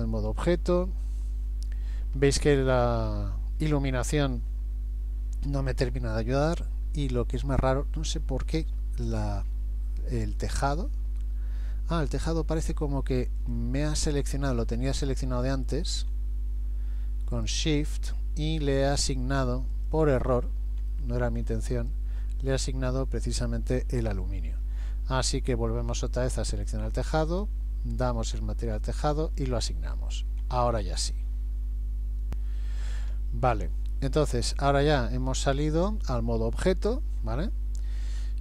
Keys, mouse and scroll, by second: 0.6 scroll down 2, 1.1 middle click, 2.7 middle click, 8.8 Tab, 12.6 right click, 14.5 click, 15.5 shift+click, 17.3 click, 17.9 middle click, 19.1 shift+click, 19.8 shift+click, 20.3 shift+click, 20.9 middle click, 21.8 shift+click, 22.5 middle click, 23.4 shift+middle click, 24.0 middle click, 27.3 click, 29.2 click, 30.5 Tab, 37.2-37.8 scroll down 2, 37.8 scroll down 1.